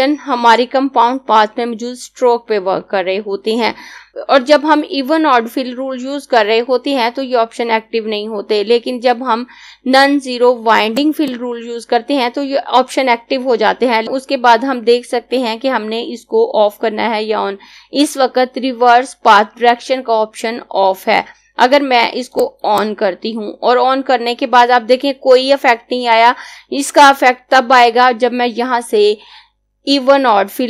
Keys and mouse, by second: 10.8 click, 22.3 click.